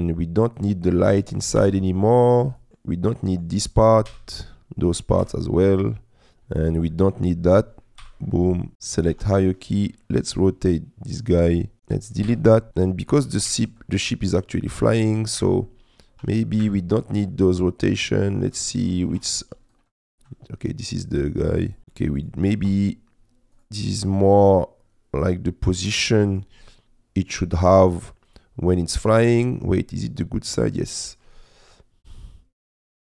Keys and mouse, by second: 0.6 click, 1.6 Delete, 2.6 click, 3.1 middle click, 4.1 Delete, 5.3 Delete, 6.6 click, 6.9 middle click, 8.1 Delete, 9.1 r, 9.2 z, 11.4 click, 11.6 click, 12.3 Delete, 12.7 Escape, 12.7 r, 12.7 z, 13.5 y, 15.4 Escape, 15.6 middle click, 16.2 r, 16.6 Escape, 17.9 click, 19.1 ctrl+z, 19.8-21.8 drag, 21.8 middle click, 23.6 click, 24.6-26.4 drag, 26.7 middle click, 28.3 middle click, 29.9-31.2 middle drag, 32.7-33.1 drag.